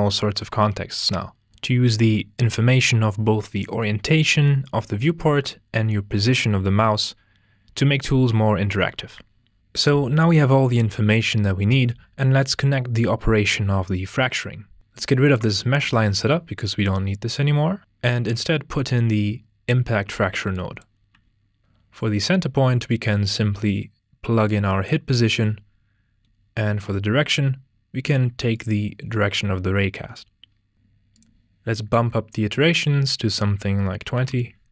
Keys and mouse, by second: 9.6 ctrl+space, 15.8 ctrl+x, 17.1 click, 19.0-20.6 drag, 21.1 g, 22.9-24.8 drag, 28.5 click, 31.1-34.3 drag.